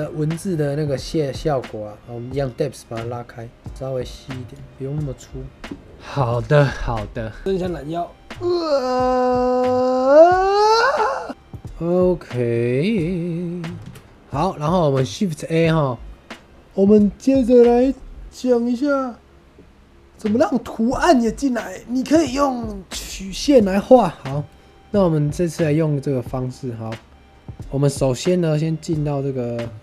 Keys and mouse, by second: 2.9 shift+middle click, 4.4-5.5 middle drag, 11.4-11.8 middle drag, 13.7 shift+a.